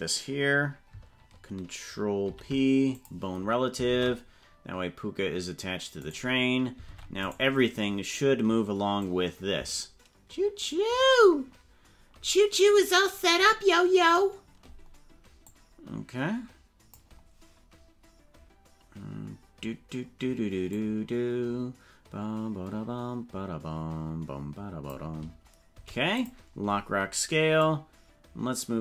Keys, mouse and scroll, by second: 2.2 ctrl+p, 4.0 ctrl+Tab, 6.0 right click, 7.0 ctrl+Tab, 7.4 right click, 9.0-14.2 drag, 15.4-17.0 drag, 20.8-25.0 drag, 27.6-28.8 drag.